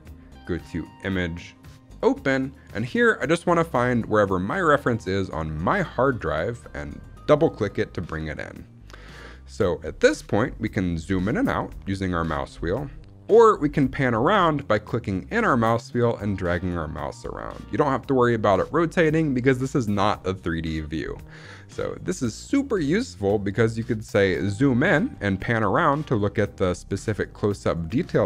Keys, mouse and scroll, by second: 0.9-2.0 drag, 10.9-11.3 scroll down 4, 11.2-11.5 scroll up 2, 11.5 scroll down 1, 11.6-12.4 scroll down 2, 12.0-12.4 scroll up 1, 12.4 scroll down 1, 12.6 scroll down 1, 13.5-14.0 scroll down 2, 14.0-15.1 scroll up 1, 15.1-19.3 middle drag, 23.1 middle click, 24.0-25.1 scroll up 5, 24.5 middle click, 25.1 middle click.